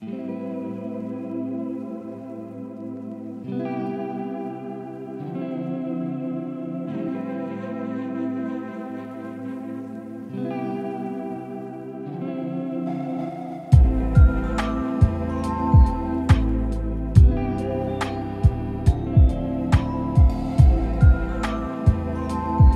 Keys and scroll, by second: 2.5 ctrl+v, 4.6-8.4 typing, 6.5 Right, 6.6 Right, 6.6 Right, 9.8 BackSpace, 9.9 z, 11.6 ctrl+a, 18.1 ctrl+z, 21.0 ctrl+a.